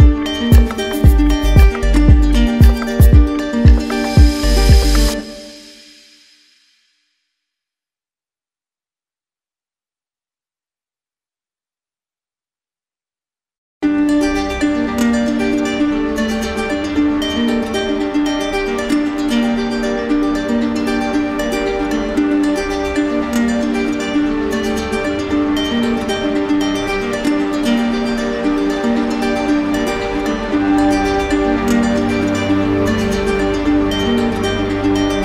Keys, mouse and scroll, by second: 2.7 click, 7.1 click, 11.4 click, 12.3 click, 13.7 click, 19.1 click, 21.1 click, 21.8 alt+click, 22.3 w, 25.1 click, 25.8 alt+click, 28.5 click, 29.5 click, 29.9 click, 31.9 click, 33.2 click, 34.2 click, 34.2 click, 34.8 alt+click.